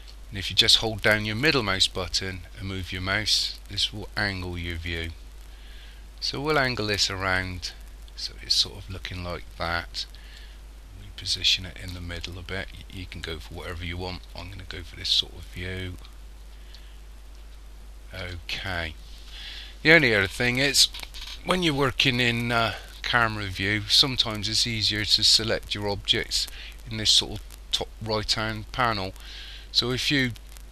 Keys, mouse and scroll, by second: 1.4 middle click, 10.4 shift+middle click, 12.5 scroll up 1, 13.2-13.5 scroll up 1, 14.8 shift+middle click.